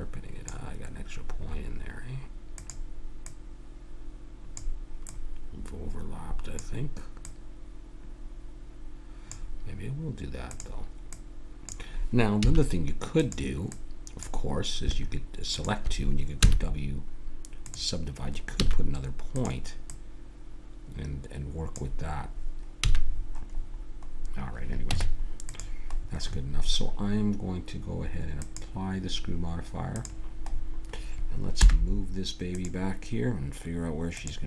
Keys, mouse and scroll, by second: 1.5-2.6 middle drag, 2.6-9.2 drag, 10.5-12.9 drag, 12.4 a, 13.1-17.7 drag, 16.4 w, 18.6 a, 19.3-21.6 drag, 22.8 a, 23.1-26.1 middle drag, 24.9 Tab, 28.4-30.5 drag, 30.5-31.6 middle drag, 30.6 click, 31.6 m, 34.1-34.4 drag.